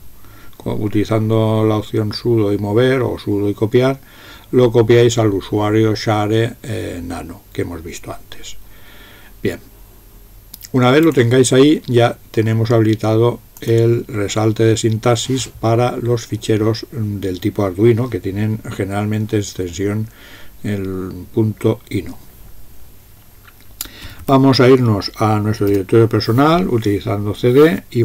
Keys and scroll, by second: 23.9-24.7 typing, 25.7 Return.